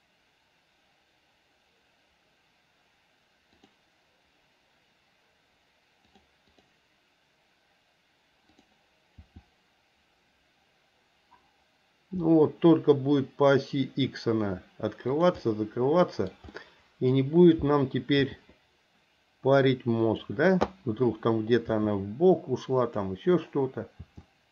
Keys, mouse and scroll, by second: 6.2 click, 6.5 click, 8.6 click, 9.2 r, 15.4-16.3 middle drag, 16.5-17.2 middle drag, 18.2 r, 21.7 r, 24.0 r.